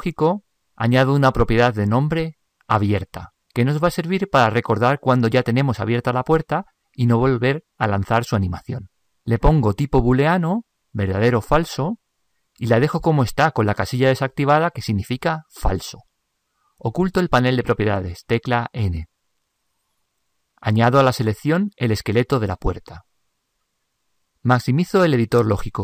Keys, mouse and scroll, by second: 21.7 n, 23.1-25.8 drag.